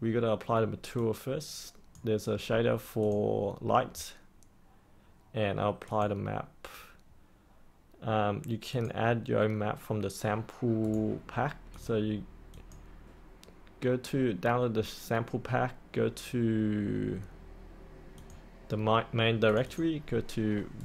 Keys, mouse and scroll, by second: 10.8 right click, 11.7 click, 20.7 right click.